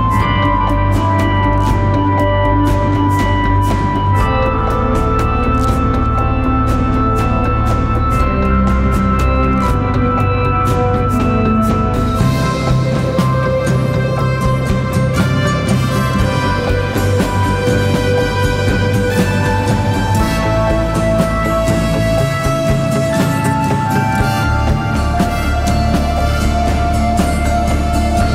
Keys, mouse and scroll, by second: 7.8 ctrl+d.